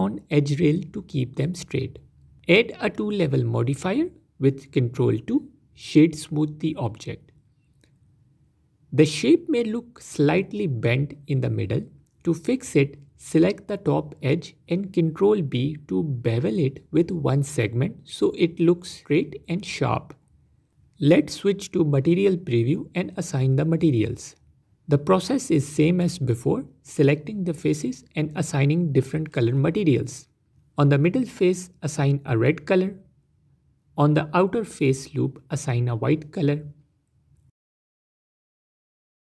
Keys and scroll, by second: 3.1 ctrl+2, 4.5 F4, 7.0 Tab, 8.4 Tab, 15.6 ctrl+b, 19.3 Tab, 21.2 z, 25.3 Tab, 27.7 ctrl+z, 30.0 ctrl+KP_Add.